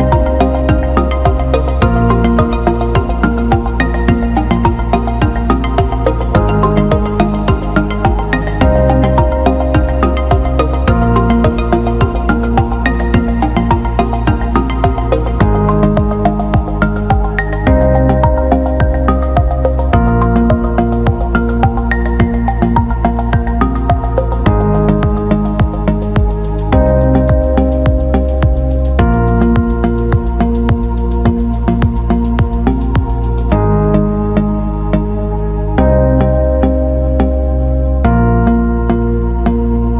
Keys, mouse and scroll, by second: 1.7 click, 2.1 click, 4.3 l, 5.3 click, 6.2-8.3 drag, 8.5 alt+middle click, 9.2 ctrl+alt+middle click, 9.5 alt+shift+middle click, 10.2 ctrl+alt+middle click, 12.1 click, 12.9 click, 13.0 click, 14.1-15.6 drag, 17.0 click, 17.5 click, 23.1 click, 24.0 click, 24.7 alt+middle click, 26.7 alt+shift+middle drag, 27.0 alt+middle click, 27.8 click, 28.8-30.4 drag, 32.4 middle click, 32.9-35.0 drag, 35.0 Tab, 36.1 click, 37.2 click, 38.2 click, 39.2 click.